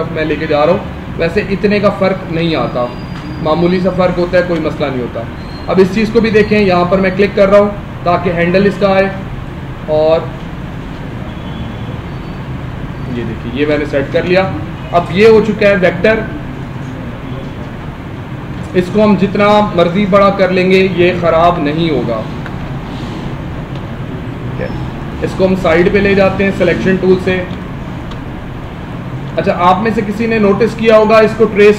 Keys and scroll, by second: 2.3 space, 13.7 space, 14.8 ctrl+-, 19.9 Escape, 21.6 ctrl+0, 22.3 Escape, 22.8 ctrl+0, 23.7 ctrl+=, 27.4 space, 29.2 space.